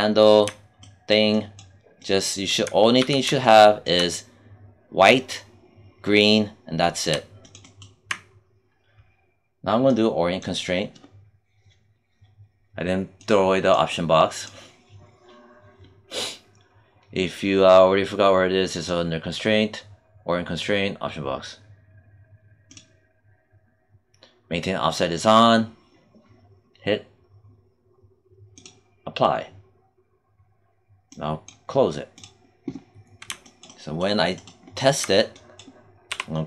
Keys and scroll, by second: 2.9 q, 36.0 w.